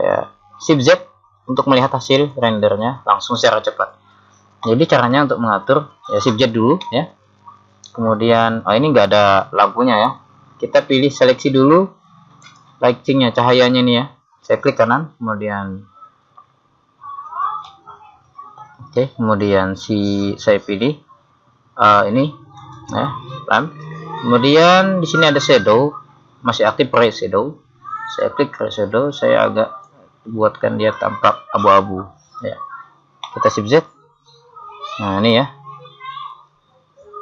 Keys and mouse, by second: 1.7 shift+z, 9.3-12.5 middle drag, 10.3 shift+z, 12.5 right click, 18.0-20.0 middle drag, 22.7 click, 24.5 middle click, 25.3-28.2 middle drag, 28.2 click, 29.9 middle click, 33.8 shift+z, 35.0 shift+z, 36.0 shift+z.